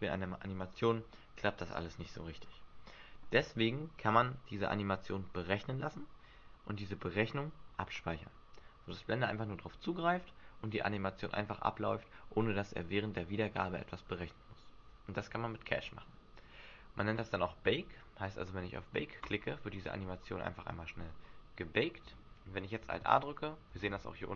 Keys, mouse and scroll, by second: 19.2 click, 22.9 alt+a, 23.8 alt+a.